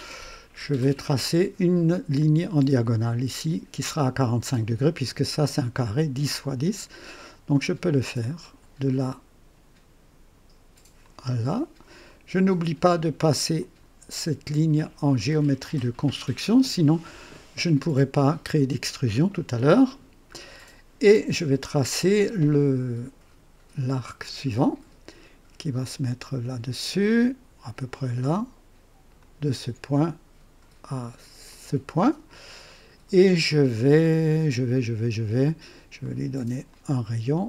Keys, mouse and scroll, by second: 2.1 click, 8.3 click, 10.9 click, 12.0 right click, 13.5 click, 15.5 click, 20.3 scroll up 2, 24.5 click, 27.8 click, 29.1 click, 31.4 click, 32.6 right click, 33.3 scroll up 2, 34.0-34.7 right drag, 36.0 right click, 36.6 click.